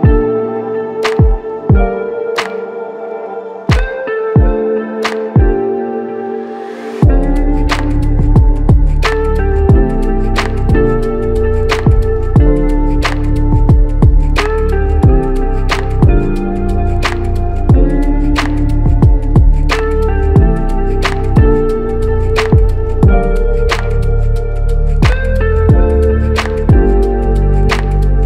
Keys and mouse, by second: 10.3 w, 22.3-23.6 typing, 24.8 shift+Caps_Lock, 25.3-25.6 typing, 27.7-28.2 typing.